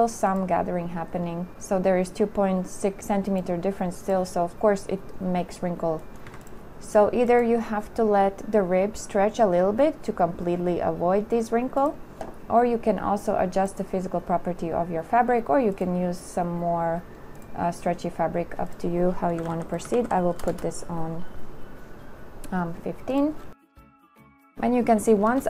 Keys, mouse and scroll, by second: 6.5 a, 19.6 KP_1, 19.7 KP_5, 20.1 KP_1, 20.2 5, 20.7 Return.